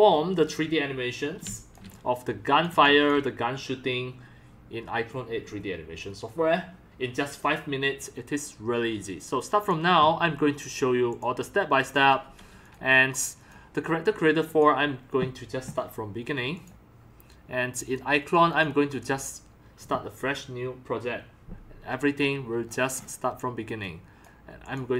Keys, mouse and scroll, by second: 1.5 x, 1.8 c, 1.9 click, 2.8 x, 15.9 click, 17.8 click, 18.5 click, 22.6 scroll down 1, 22.9 scroll up 1.